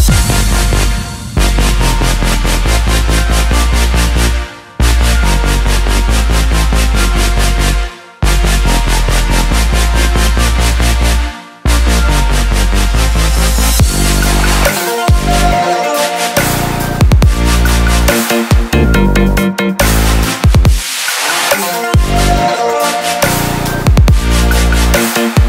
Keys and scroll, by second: 4.2 ctrl+t.